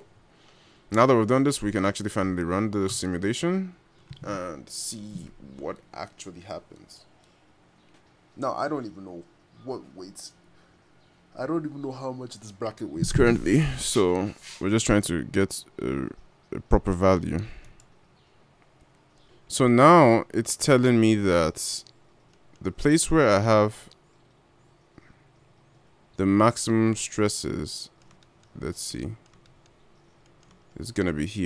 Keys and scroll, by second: 22.0 g.